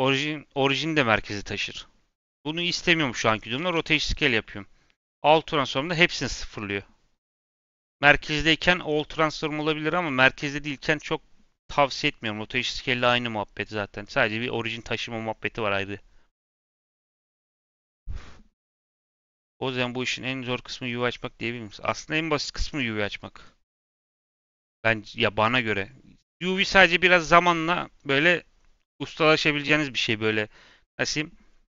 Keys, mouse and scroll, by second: 3.5 ctrl+a.